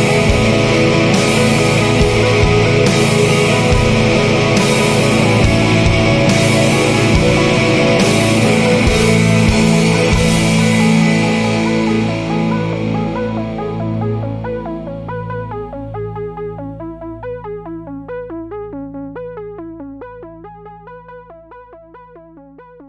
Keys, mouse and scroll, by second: 0.5 click, 0.9 0, 13.7 1, 15.1 2, 16.9 scroll down 2, 17.6 scroll up 2, 19.7-21.7 drag.